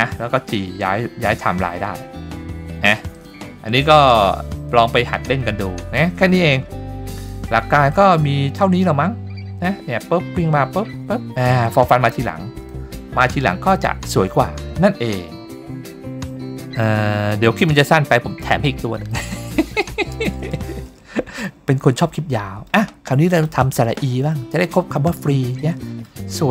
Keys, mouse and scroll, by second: 0.5 g, 5.6-6.4 scroll down 2, 6.4-7.2 scroll down 1, 7.2 click, 7.9 click, 12.5 click, 17.8-18.7 middle drag, 19.1-19.5 middle drag, 20.5-20.9 shift+middle drag, 21.1-21.5 scroll up 2, 21.5-22.0 middle drag, 22.3-22.7 middle drag, 23.3 click, 23.9-24.3 middle drag, 25.6 middle click, 26.4-26.5 shift+middle drag.